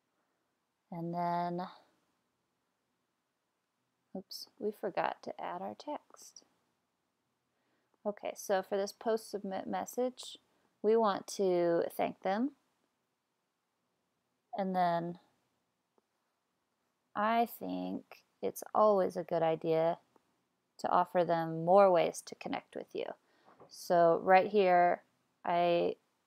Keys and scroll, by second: 16.6 super+c, 22.0 super+v.